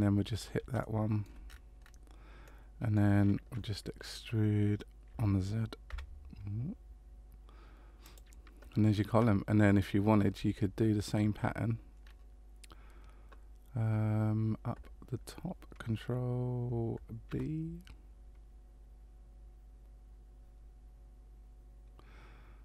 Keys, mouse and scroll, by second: 0.8 shift+middle click, 1.4-1.8 scroll down 4, 1.5 scroll up 1, 1.8-2.4 scroll down 3, 2.4 middle click, 5.1 e, 10.5 shift+middle click, 12.0 scroll up 2, 17.3 ctrl+b.